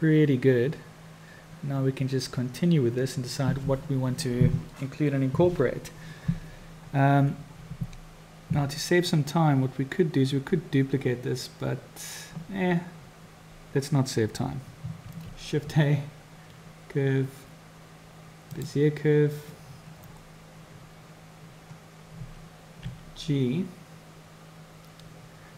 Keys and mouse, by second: 15.0 shift+a, 22.9 g.